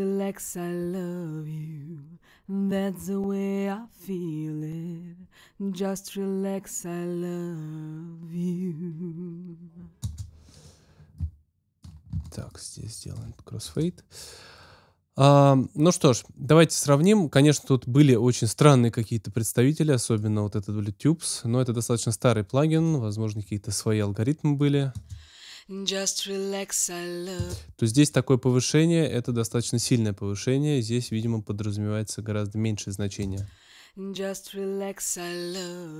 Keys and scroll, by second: 10.0 space, 24.9 space, 27.3 space, 33.2 space.